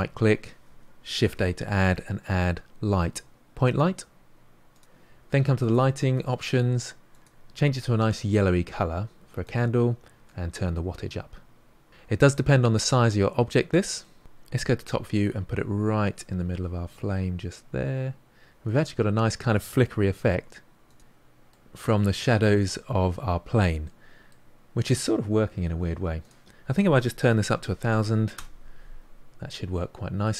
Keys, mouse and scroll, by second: 8.1 click, 10.4-12.3 drag, 12.3-14.6 middle drag, 14.6 KP_7, 15.9 g, 20.8 s, 21.0-28.3 middle drag, 28.3 0, 29.7-30.3 middle drag.